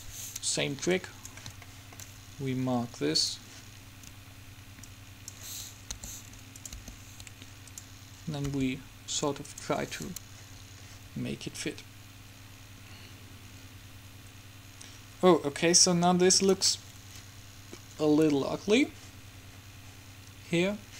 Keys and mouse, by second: 1.1 click, 1.9-4.8 middle drag, 4.8-7.0 drag, 6.1 g, 7.0 r, 8.6 g, 10.6-13.5 drag, 17.0-20.9 middle drag.